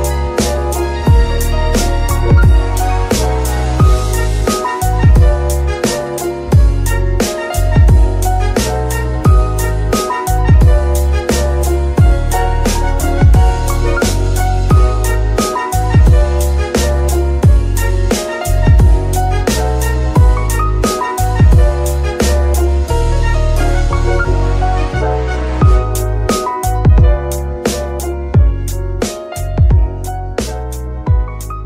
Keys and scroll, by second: 3.1-4.6 typing, 4.8 Return, 9.1 g, 10.1 Tab, 10.6 s, 12.6 KP_3, 13.2 s, 14.5 r, 15.4 KP_Subtract, 15.6 KP_9, 15.8 KP_0, 16.5 Return, 28.3 KP_9, 28.3 KP_0, 29.3 Escape, 30.3 KP_9, 30.4 KP_0, 30.5 Return.